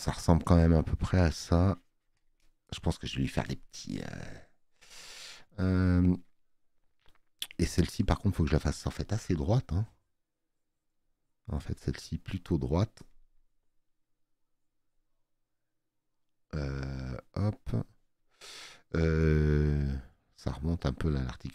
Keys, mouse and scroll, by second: 4.2 space, 4.4 click.